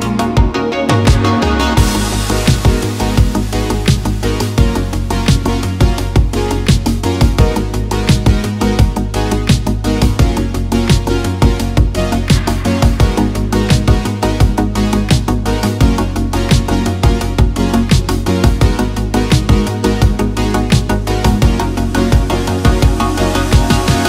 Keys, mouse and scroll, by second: 2.2 KP_1, 2.3 middle click, 2.9 e, 5.1 click, 5.3-6.5 middle drag, 6.7 click, 7.0 click, 7.6 middle click, 7.9 middle click, 8.4 click, 8.6 middle click, 8.8 Tab, 8.9 middle click, 9.4 click, 9.8-10.5 drag, 12.3-12.6 drag, 12.9 click, 13.7 click, 14.3 n, 15.0 shift+a, 17.2 click, 18.3 click, 22.3 click, 22.8 middle drag, 23.6 click.